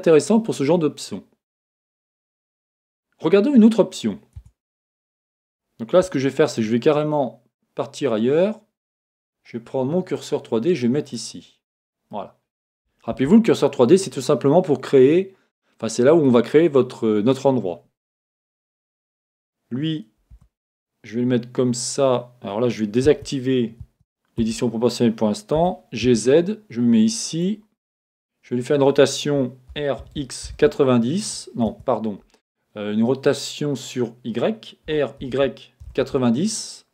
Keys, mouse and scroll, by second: 4.7 Tab, 5.0 scroll down 1, 5.2-10.2 middle drag, 10.2 click, 10.3-12.0 middle drag, 12.1-13.1 scroll up 1, 13.1 shift+a, 18.3 KP_1, 20.5 g, 24.0 Escape, 27.4 click, 31.8 Escape, 31.8 r, 34.9 r.